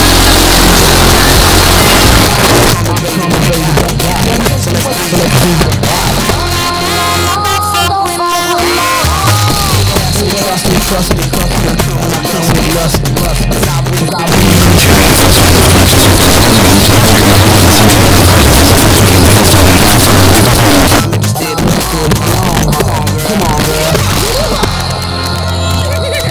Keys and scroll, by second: 2.2 Page_Down, 20.4 Page_Down.